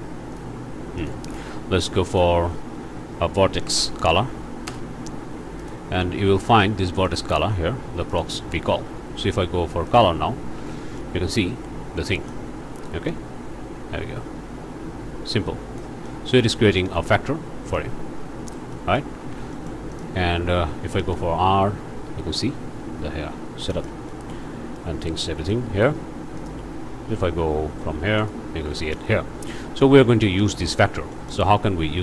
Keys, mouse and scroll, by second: 0.3 click, 1.0 shift+click, 1.3 shift+a, 2.1 click, 3.5 v, 3.6 e, 3.9 r, 4.6 Return, 5.6 click, 5.9-6.4 scroll up 1, 6.5 click, 7.0 click, 8.1 click, 8.5-9.1 scroll down 4, 9.9 ctrl+shift+click, 11.0-12.5 ctrl+shift+drag, 13.1-16.0 drag, 16.1-17.3 drag, 17.7-19.2 drag, 19.2 alt+a, 19.5 alt+click, 19.9 alt+click, 21.0 r, 23.0 Escape, 23.4-23.7 scroll down 1, 23.7 shift+click, 24.3 click, 25.7 r, 26.4 click, 27.1 g, 28.2 alt+click, 28.5 alt+a, 28.7 alt+scroll down 2, 28.8 alt+click, 29.1 alt+scroll up 2, 31.1 middle click, 31.4-32.0 scroll down 2.